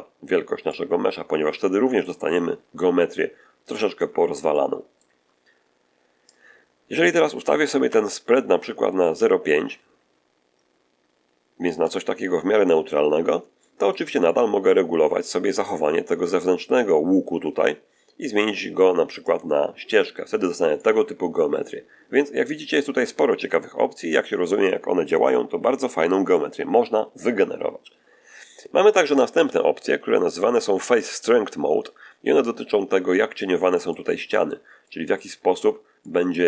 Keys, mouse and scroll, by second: 0.6-2.1 middle drag, 2.2-4.1 middle drag, 4.4 shift+middle click, 6.2-11.8 drag, 12.6 scroll up 2, 13.5 shift+middle click, 14.1 shift+middle click, 18.3 click, 19.2 click, 20.6-23.1 middle drag, 33.8 middle click, 34.7 middle click, 35.9 middle click.